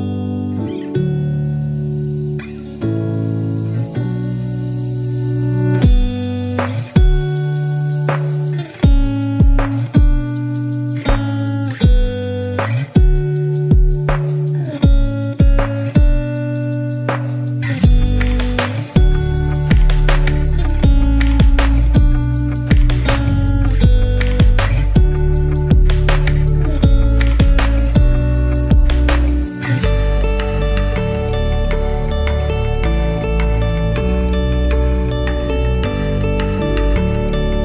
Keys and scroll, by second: 3.9 1, 4.5 Return, 14.5 BackSpace, 15.7 a, 16.6 v, 22.1 BackSpace, 22.4 Left, 23.1 a, 24.3 Tab, 25.2 super+z, 28.7 BackSpace, 29.0 BackSpace, 29.8 Return, 30.5 a, 32.0 Right, 33.1 Left, 34.3 super+-, 35.4 v, 36.7 space.